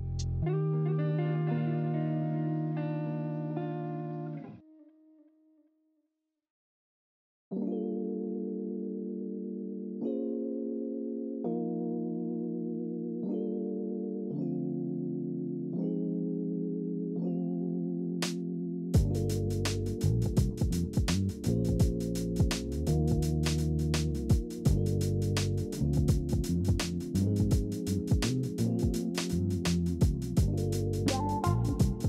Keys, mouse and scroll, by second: 11.0 ctrl+z, 16.6 ctrl+z, 20.2 alt+scroll.